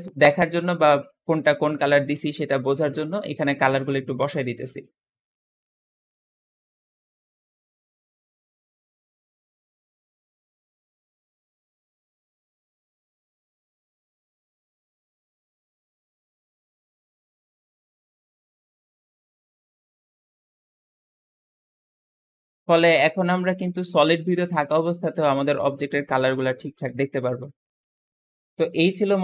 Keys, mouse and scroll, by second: 4.8-5.4 scroll down 2, 4.9 middle click, 6.0 click, 7.4 click, 8.6 middle click, 9.1 click, 10.3 click, 12.4 click, 14.4 click, 16.7 click, 18.2 click, 19.6 click, 21.2 click, 22.7-24.0 middle drag, 25.8 middle click, 28.7 middle click.